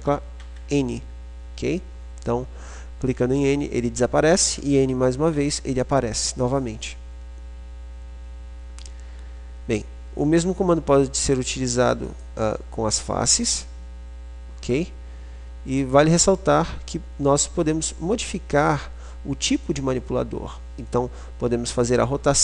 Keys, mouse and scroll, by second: 0.0 n, 0.5 n, 3.5 n, 4.5 n, 11.0-12.2 drag, 12.2 middle click, 13.0 click, 14.0-15.0 right drag, 19.9-22.4 right drag.